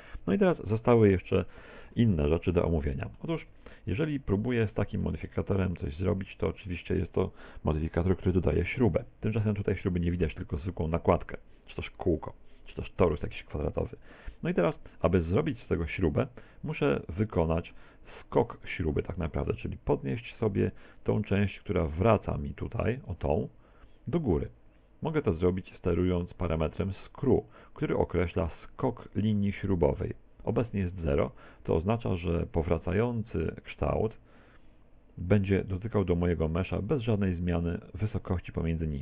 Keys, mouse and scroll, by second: 2.6-3.1 scroll down 4, 2.9 middle click, 3.4 Tab, 3.6 middle click, 4.2 middle click, 5.2 shift+middle click, 5.9 middle click, 16.4 middle click, 20.6 middle click, 22.7 click, 31.4 middle click, 32.4 middle click, 36.7-38.8 scroll up 6.